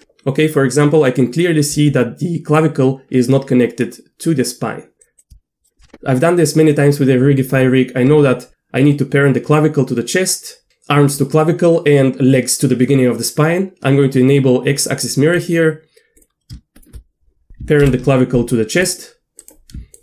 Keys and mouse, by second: 1.7 r, 5.3 r, 8.1 Tab, 15.4 click, 16.7 shift+click, 17.5 ctrl+p, 17.8 ctrl+p, 19.4 click, 19.9 shift+click.